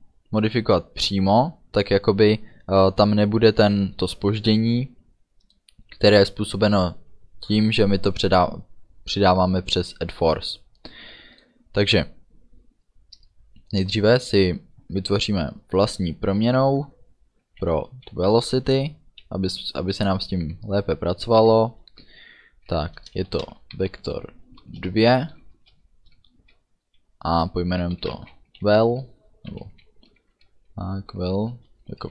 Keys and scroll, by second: 13.2 Return, 23.4 shift+v, 23.7 e, 25.0 Return, 25.6 space, 28.1 v, 28.3 e, 31.6 space.